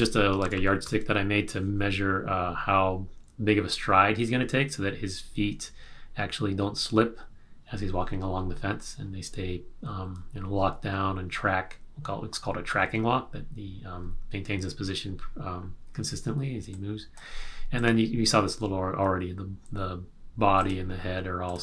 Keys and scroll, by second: 0.4 super+-.